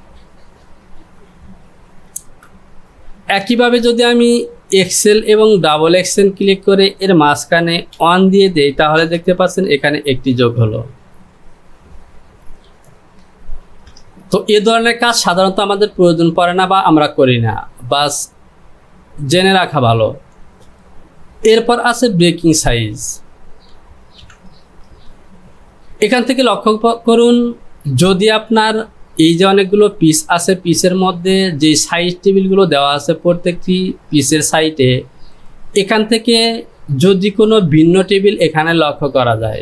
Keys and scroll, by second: 1.9 ctrl+z, 8.0 KP_1, 9.0 Return, 13.7 ctrl+z, 24.3 j.